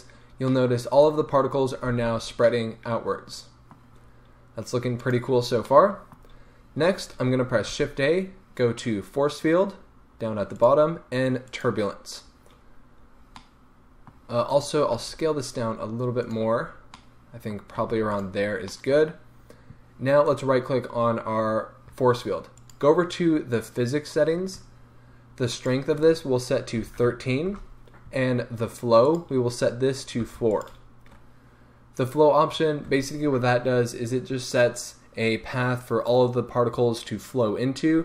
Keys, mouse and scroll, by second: 0.5-1.0 middle drag, 1.0 right click, 1.9 space, 2.2 scroll down 1, 2.5-5.0 middle drag, 5.0 click, 5.5 scroll down 2, 5.7-14.5 middle drag, 6.2-7.6 scroll up 2, 7.6 shift+a, 14.5 right click, 15.0 s, 16.2-18.2 middle drag, 16.3 click, 16.6-17.0 scroll, 17.8 s, 18.2-18.7 drag, 18.7-20.2 middle drag, 20.2 right click, 22.5 click, 23.5 click, 25.5-30.6 drag, 27.5 Return, 31.0-31.9 scroll up 1.